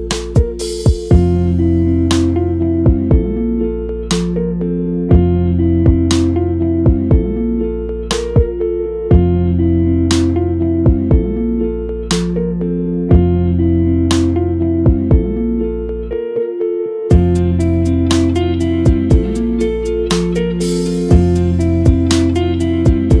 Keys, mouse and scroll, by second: 0.0 scroll down 2, 2.4 scroll down 5, 2.6 Left, 2.7 scroll up 3, 3.3 Tab, 3.6 2, 3.8 Left, 4.1 middle click, 4.2 scroll up 1, 4.5 Left, 5.0 2, 5.1 Left, 5.4 Left, 5.9 1, 6.3 Left, 6.6 Left, 7.2 Left, 7.5 Left, 7.8 scroll down 3, 7.9 Tab, 8.5 click, 8.6 scroll up 1, 9.0 middle click, 9.2 scroll up 2, 9.4 click, 9.5 Tab, 9.8 shift+middle click, 9.9 scroll up 1, 10.2 middle click, 10.7 click, 10.9 click, 11.3 2, 11.5 alt+click, 11.8 click, 12.3 shift+middle click, 12.6 scroll up 1, 13.0 alt+click, 13.4 alt+click, 14.0 middle click, 14.4 click, 15.2 alt+click, 15.4 click, 15.7-16.2 scroll down 2, 15.8 Tab, 15.9 middle drag, 16.3 click, 17.0-17.3 middle drag, 17.3-17.8 scroll down 2, 19.2-23.2 middle drag.